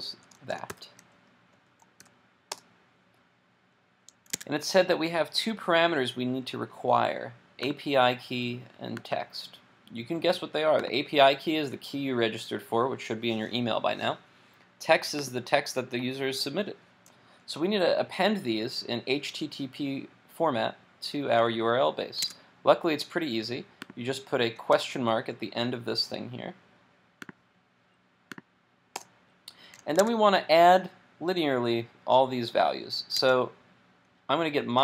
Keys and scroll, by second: 0.7 super+v, 4.3 super+Tab, 22.2 super+Tab, 30.0 super+Tab, 33.3 super+Tab.